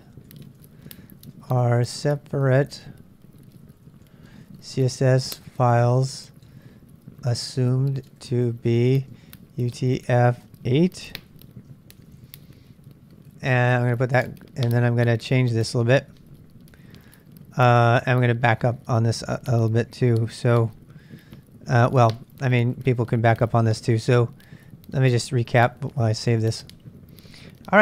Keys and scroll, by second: 0.0-14.0 typing, 15.2-17.9 typing, 22.2 ctrl+[, 22.3 ctrl+j, 22.5 k, 23.6 ctrl+[, 23.7 ctrl+j, 23.8 k, 25.4-26.4 typing.